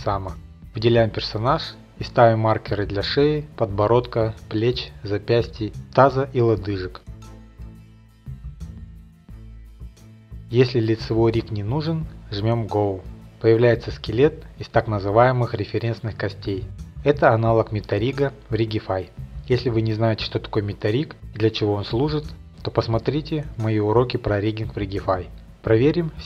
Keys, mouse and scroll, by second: 0.1 click, 0.8 click, 1.6 click, 2.5 click, 4.0 click, 4.9 click, 5.5 click, 5.7 click, 6.8 click, 8.1 click, 8.4 click, 9.0 click, 9.6 click, 10.5 click, 12.1 click, 17.0 middle click, 17.4 middle click, 17.7 scroll, 18.7-19.3 middle drag, 19.8 middle click, 20.0 middle click, 20.3 scroll, 22.5 middle click, 23.7 middle click, 25.0 click.